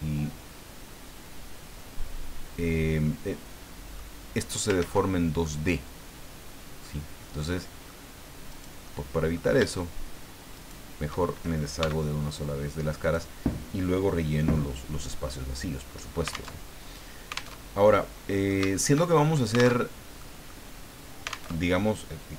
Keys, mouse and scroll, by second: 3.7 scroll up 1, 4.8 ctrl+z, 5.4-7.0 middle drag, 7.2 scroll up 1, 7.5 middle click, 8.5 right click, 8.8 middle click, 10.5 shift+right click, 11.8 x, 13.0 right click, 14.6-16.2 middle drag, 16.6 alt+Tab, 17.5 alt+Tab, 17.8 alt+middle click, 18.8 shift+middle click, 19.2 shift+middle click, 19.7 alt+Tab, 20.2 middle click, 21.5 alt+Tab.